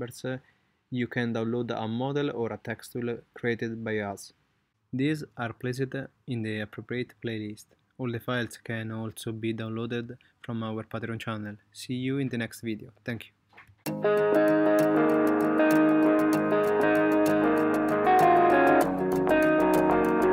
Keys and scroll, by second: 8.3 space.